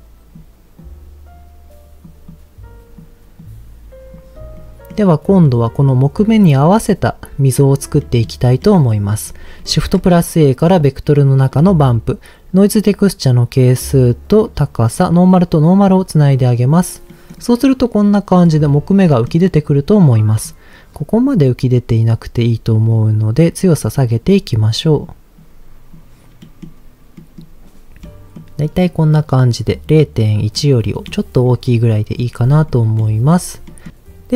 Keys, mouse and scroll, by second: 0.7-2.1 drag, 2.3 click, 3.3 click, 4.5 middle click, 5.5-6.5 middle drag, 8.0 middle click, 8.6 middle click, 9.6 shift+a, 11.5 middle click, 12.5-14.5 drag, 15.1 click, 16.3 click, 17.1-18.5 middle drag, 17.3-17.9 scroll down 4, 18.5-19.3 scroll up 3, 19.0 middle click, 19.6 scroll up 1, 21.4 middle click, 22.9-23.9 drag, 25.0 click, 26.4 middle click, 27.1 middle click, 27.4-28.0 scroll down 2, 28.0 middle click, 28.7 middle click, 28.9-29.7 scroll up 1, 30.6 middle click, 31.4 middle click, 32.7 middle click, 33.3 scroll down 1, 33.7 middle click.